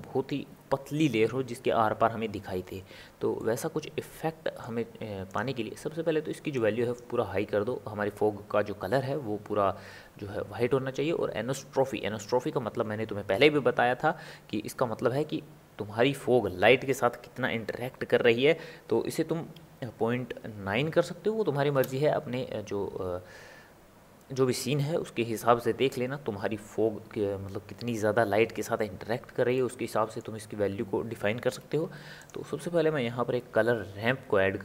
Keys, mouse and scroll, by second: 5.3 click, 11.5-14.6 drag, 29.5-31.8 middle drag, 31.8 shift+a.